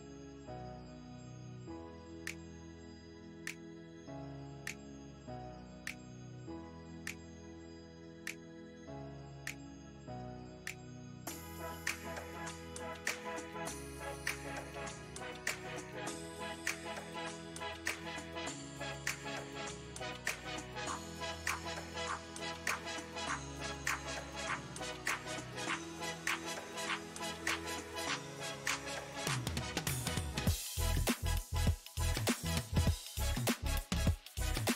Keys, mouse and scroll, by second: 0.7 middle click, 1.2-4.2 drag, 5.1 middle click, 5.6 click, 6.3 middle click, 6.8 click, 7.7 middle click, 8.2-10.3 drag, 10.3 middle click, 10.7 click, 11.5-12.8 middle drag, 12.8 shift+c, 13.4 f, 14.8-19.3 ctrl+drag, 19.3 middle click, 20.0 f, 21.0-23.3 ctrl+drag, 23.3-24.8 middle drag, 24.8-27.6 drag, 27.6-29.5 middle drag, 29.5-31.8 shift+drag, 31.8 middle click, 32.7-34.2 drag, 34.2-34.7 middle drag.